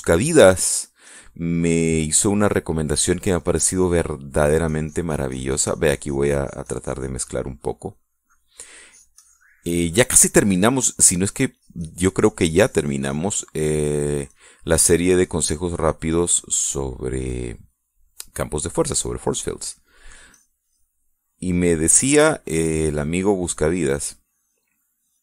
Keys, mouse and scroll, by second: 0.8 shift+scroll down 1, 1.7 click, 3.9 click, 5.1-9.3 drag, 9.5 click, 10.5 middle click, 11.7 middle click, 12.2-15.1 drag, 15.1 middle click, 15.6-17.1 drag, 17.1 middle click, 17.5 scroll up 1, 17.8 click, 18.6 middle click, 19.0-19.3 scroll up 1, 19.3 click, 20.1 scroll up 1, 20.4-21.7 drag, 21.7-22.5 scroll up 1, 23.3 middle click, 23.9-24.3 scroll up 1, 24.3 click, 25.0 click.